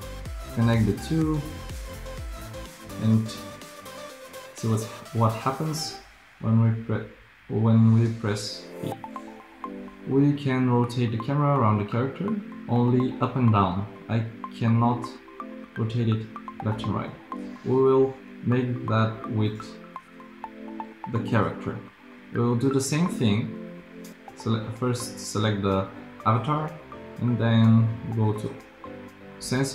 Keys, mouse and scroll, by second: 4.7 p.